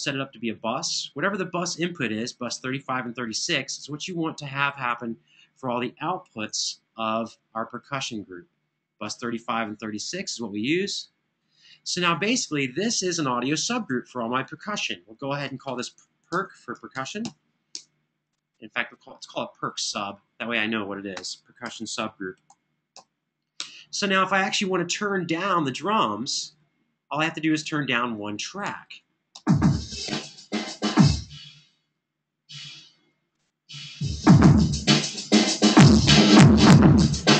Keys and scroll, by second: 15.9-17.5 typing, 20.3 Tab, 20.9-22.7 typing, 23.3 Return, 29.1 space.